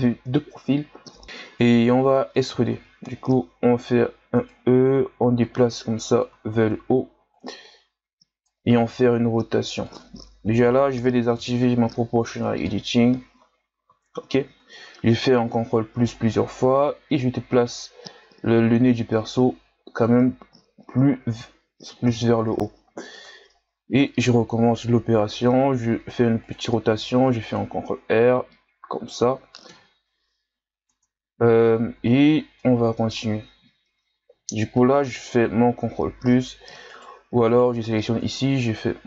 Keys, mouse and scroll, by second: 1.2 shift+scroll down 5, 2.8 e, 5.4-6.6 drag, 6.6 ctrl+z, 7.4-8.8 drag, 8.8 r, 10.6 o, 11.4 KP_1, 12.3 Tab, 12.7-13.3 scroll down 4, 13.4-13.9 scroll up 4, 13.9 Tab, 15.0 ctrl+KP_Add, 17.1-21.3 drag, 21.3 Tab, 22.1 KP_3, 23.2 Tab, 23.6 ctrl+scroll down 4, 23.9-25.3 scroll up 2, 25.3 r, 26.9 ctrl+r, 29.7 KP_1, 30.6-31.0 scroll down 1, 31.0 Tab, 31.6 scroll up 1, 32.0 Tab, 32.6-35.1 middle drag, 35.1 ctrl+KP_Add, 36.9 right click, 37.5 right click, 38.3 ctrl+KP_Add, 38.8 ctrl+KP_Add.